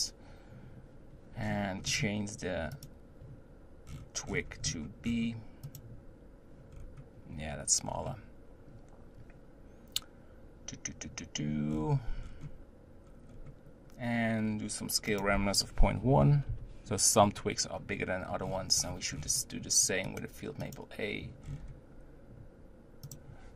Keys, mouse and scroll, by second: 1.4-2.7 scroll down 12, 2.7-6.7 drag, 6.7-7.8 scroll up 4, 7.8-8.7 scroll down 1, 11.7-13.0 scroll down 10, 13.0-15.1 scroll up 6, 15.1-18.1 drag, 18.4-20.5 scroll up 25, 20.5 click, 21.0-21.4 drag, 21.4-22.9 scroll down 7, 23.0-23.5 drag.